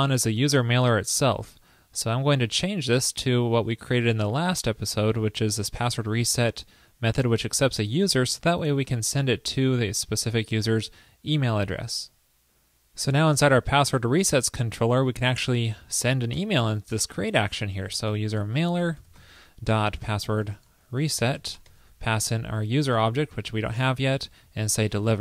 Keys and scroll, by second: 4.5 super+v, 11.9 super+s.